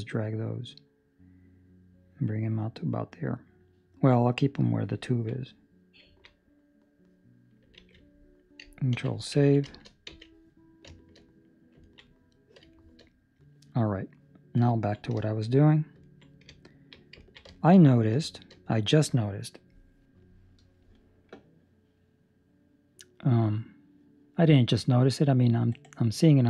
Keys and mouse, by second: 5.0 ctrl+middle click, 5.3 middle click, 6.0 ctrl+middle click, 6.4 middle click, 7.7 alt+a, 8.9 ctrl+s, 9.3 ctrl+middle click, 9.6 shift+middle click, 10.0 z, 10.9 shift+middle click, 11.2 middle click, 11.8 ctrl+middle click, 12.0 middle click, 12.7 shift+middle click, 13.0 middle click, 14.1 middle click, 14.5 shift+middle click, 14.7 ctrl+middle click, 14.8 ctrl+middle click, 15.1 shift+middle click, 15.3 shift+middle click, 15.5 middle click, 16.0 ctrl+middle click, 16.7 alt+right click, 17.3 ctrl+middle click, 17.4 shift+middle click, 17.7 middle click, 18.2 shift+middle click, 19.4 middle click.